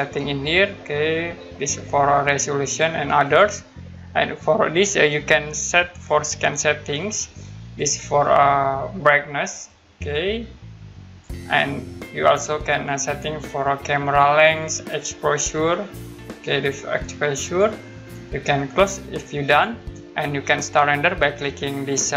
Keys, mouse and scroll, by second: 3.2 click, 6.1 click, 9.7 click, 11.9-13.3 scroll down 1, 13.4-14.6 scroll down 1, 15.5 click, 19.5 click.